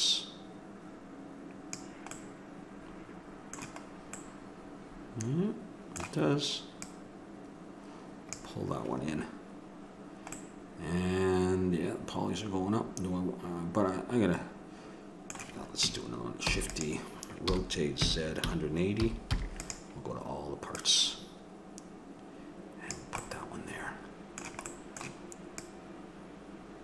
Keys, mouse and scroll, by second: 0.0-2.2 drag, 2.2-4.7 middle drag, 6.8-10.1 drag, 10.3-12.1 middle drag, 16.5 shift+d, 17.4 r, 20.9-22.6 drag, 23.2-25.5 middle drag, 25.5-26.5 drag.